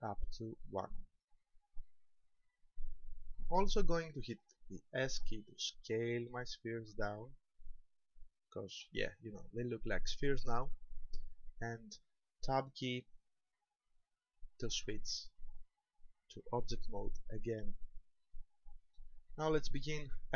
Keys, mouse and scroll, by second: 1.2 click, 4.9 s, 9.2 ctrl+click, 12.7 Tab, 13.7-14.3 scroll down 4, 14.7-15.2 scroll down 1, 15.2-16.8 scroll down 2, 16.8 scroll down 1, 17.3 shift+middle click, 18.5-18.9 scroll up 3.